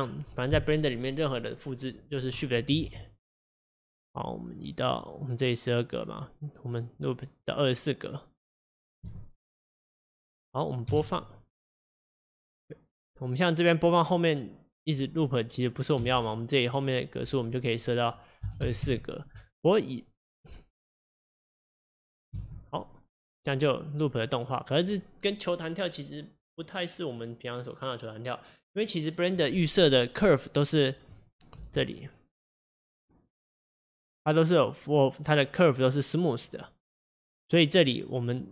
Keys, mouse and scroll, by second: 2.8 shift+d, 5.3-10.9 drag, 10.9 space, 16.1 space, 20.1-22.4 drag, 22.4 space, 31.7 space, 37.6 click, 38.4-38.5 drag.